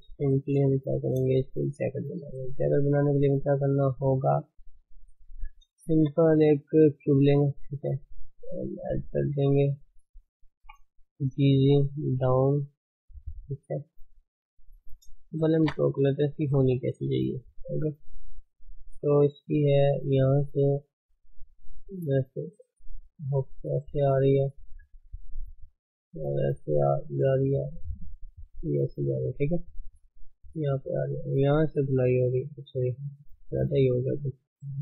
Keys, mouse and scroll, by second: 0.3 middle click, 0.6 KP_1, 1.9-2.3 scroll down 2, 2.6 scroll up 1, 4.8-5.1 scroll down 2, 5.3 Tab, 7.1 shift+a, 7.4 middle click, 7.4-8.0 scroll down 4, 8.0 s, 9.3 Tab, 9.4 middle click, 9.4 scroll up 4, 9.8 shift+z, 10.6 g, 12.9 scroll up 1, 13.2 shift+middle click, 13.9 shift+z, 14.8 shift+z, 15.2 shift+z, 15.5 Tab, 16.2 click, 17.7 shift+click, 17.9 shift+h, 18.9 click, 20.9-25.9 drag, 27.3-28.8 drag, 28.8 d, 30.0-30.8 drag, 30.8 d, 31.4 click, 32.3 d, 33.0-34.6 right drag, 34.6-34.8 drag.